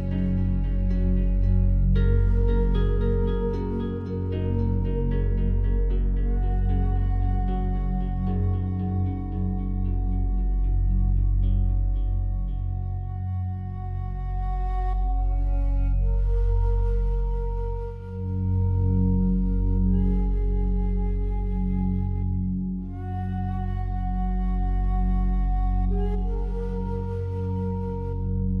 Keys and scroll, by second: 24.9 ctrl+z.